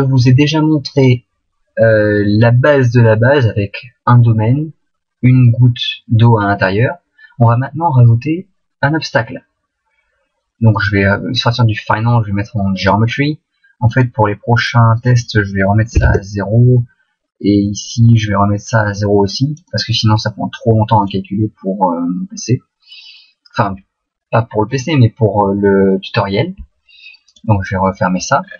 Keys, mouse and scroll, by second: 0.2 click, 1.0 click, 1.8-4.1 scroll up 3.